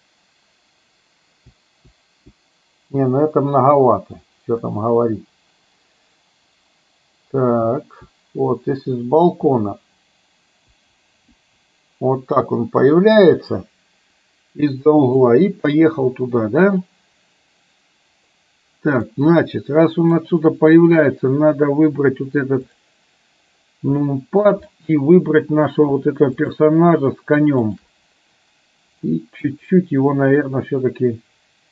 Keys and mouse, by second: 18.3 middle click, 19.8 middle click, 22.7 click, 24.2 shift+middle click, 29.1 middle click, 30.7-31.7 drag.